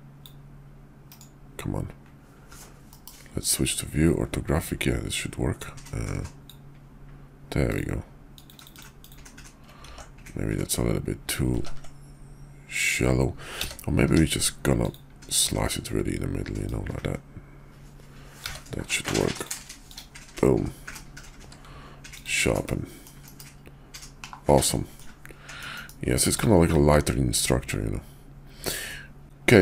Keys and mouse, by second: 2.9 shift+v, 5.6-6.5 drag, 9.0 click, 9.8 ctrl+z, 11.8 ctrl+z, 13.5 d, 13.9 d, 16.6-19.5 drag, 21.4 q, 22.6-23.1 middle drag, 23.2 KP_5, 24.1 /, 24.9-25.6 middle drag, 25.7 KP_5, 26.6-28.8 middle drag.